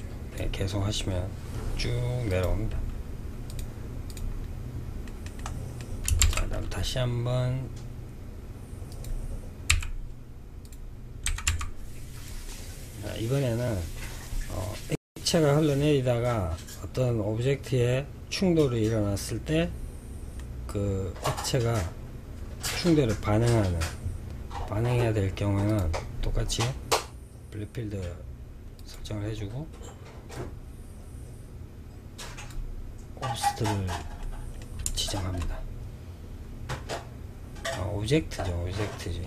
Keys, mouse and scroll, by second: 1.6-4.3 drag, 4.3-5.5 middle drag, 5.5 shift+a, 9.0 s, 10.5 g, 11.8-14.9 middle drag, 19.5-22.5 middle drag, 24.8 click, 27.9-30.9 drag, 32.7-37.1 middle drag.